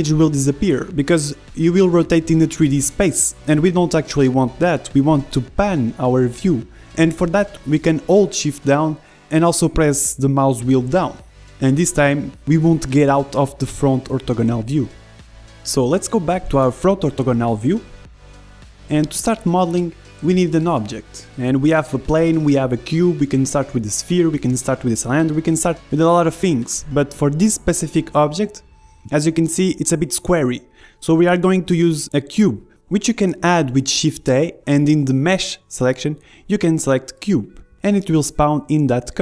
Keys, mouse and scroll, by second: 0.0-7.2 middle drag, 7.2 KP_1, 10.4-14.7 middle drag, 14.7 KP_1, 15.5 middle click, 16.1 click, 17.6 shift+a, 25.0-36.6 drag.